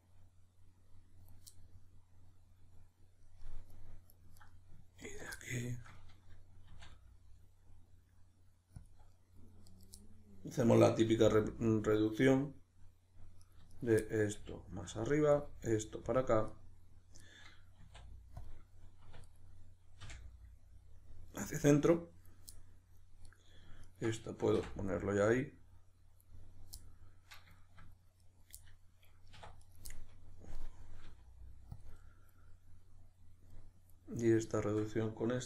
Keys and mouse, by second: 4.4 right click, 5.0 ctrl+right click, 5.4-9.7 middle drag, 6.7 e, 8.9 click, 9.7 right click, 10.0-11.9 middle drag, 11.1 g, 11.9 click, 13.4 right click, 13.7 shift+right click, 14.0-15.1 middle drag, 14.4 g, 15.1 click, 15.3 right click, 15.5 g, 16.2 click, 16.5 right click, 17.2 right click, 17.8 e, 18.5 click, 19.0 2, 19.3 right click, 20.0 f, 21.6-23.3 middle drag, 23.3 right click, 23.8 shift+right click, 24.6 f, 25.0-28.2 middle drag, 28.2 right click, 28.5-29.6 middle drag, 29.3 1, 29.6 right click, 29.9-34.2 middle drag, 31.1 g, 31.8 click, 34.2 right click, 34.5 shift+right click.